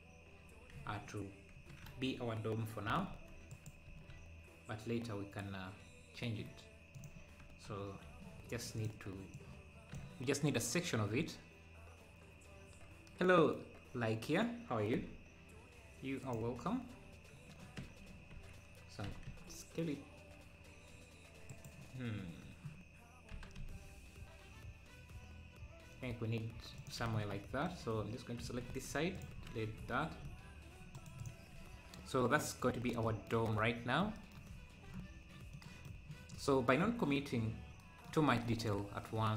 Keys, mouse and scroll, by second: 0.7 z, 1.6 KP_7, 2.9 s, 3.9 s, 7.5 KP_1, 8.1 Tab, 8.8-12.4 drag, 14.9 x, 17.8 Tab, 19.1 s, 27.6-28.7 drag, 28.7 x, 30.9 right click, 33.8-34.2 scroll down 2, 35.2-35.5 scroll down 2, 35.5 middle click, 38.5-38.8 scroll up 1.